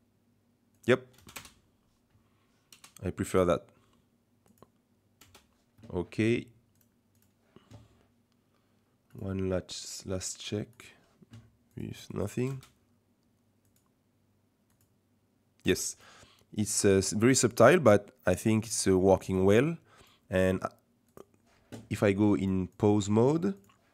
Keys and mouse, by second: 0.7 click, 1.2 space, 1.4 KP_0, 2.7 KP_0, 3.2 space, 5.2 space, 6.7 click, 9.1-10.3 drag, 10.7 click, 11.7 click, 12.1 click, 12.4 space, 13.7 click, 14.7 click, 15.7 space, 15.8 click, 17.4-20.0 drag, 21.1 click, 22.4 click, 22.8 click.